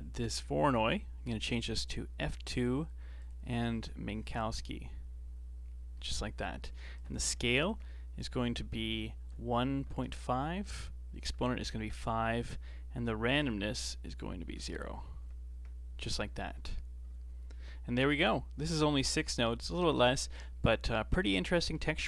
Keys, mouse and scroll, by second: 1.8-5.6 drag, 5.6 scroll up 2, 5.9 middle click, 6.9-9.9 drag, 16.7-17.0 scroll down 4, 17.9-18.2 scroll down 1, 18.2 middle click, 18.8-19.1 scroll down 3, 19.1-21.8 middle drag, 21.8-22.0 scroll up 9.